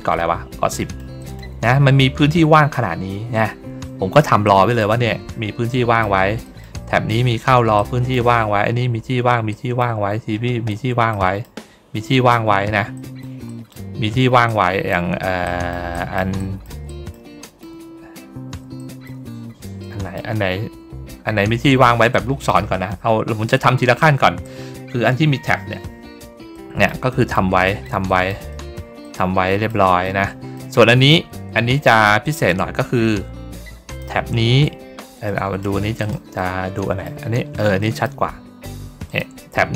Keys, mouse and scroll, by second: 0.6 middle click, 1.1 middle click, 4.3 middle click, 5.6 middle click, 6.3 middle click, 7.7 middle click, 9.4 middle click, 11.0 middle click, 12.8 middle click, 13.4 middle click, 14.4 middle click, 15.3 middle click, 15.8 middle click, 16.3 middle click, 16.8 middle click, 17.3 middle click, 17.8 ctrl+middle click, 18.7 middle click, 19.2 ctrl+middle click, 19.7 middle click, 20.3 ctrl+middle click, 20.7 ctrl+middle click, 22.0 middle click, 22.7 scroll up 1, 23.3 scroll down 1, 23.8 ctrl+scroll up 2, 26.4 middle click, 27.0 middle click, 27.5 middle click, 28.0 middle click, 28.4 middle click, 28.9 middle click, 29.9 middle click, 32.1 click, 33.8 shift+click, 35.2 middle click, 35.9 click, 36.3 middle click, 37.2 middle click, 37.7 middle click, 39.0 click.